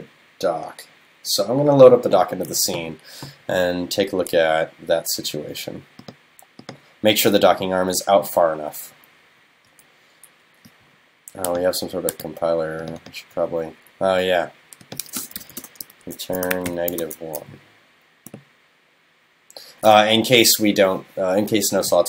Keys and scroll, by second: 17.0 super+s.